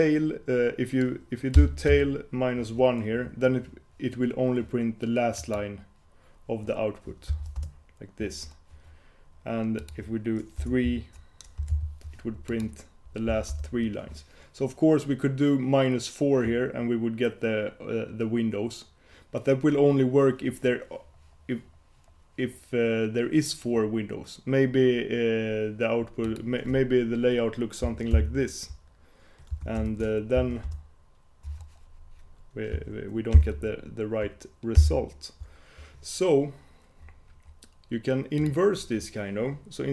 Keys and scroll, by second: 28.3 super+h, 30.0 shift+super+Return, 33.5 shift+super+h, 34.9 super+h.